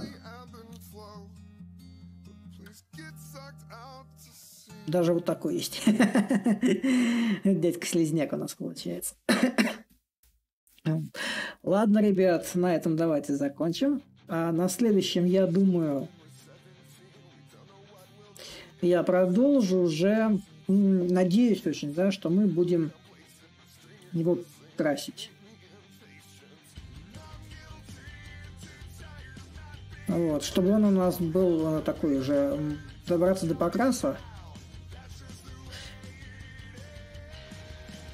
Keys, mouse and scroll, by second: 0.0-2.7 middle drag, 2.7-7.7 drag, 9.6-14.6 drag, 15.4-20.4 drag, 21.9-26.9 drag, 27.4-32.4 drag, 33.1-38.1 drag.